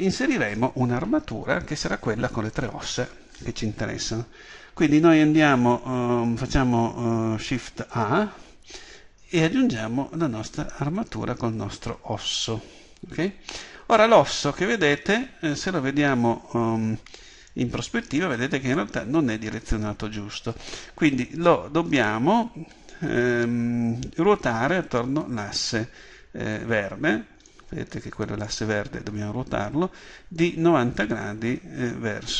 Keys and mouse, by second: 8.0 shift+a.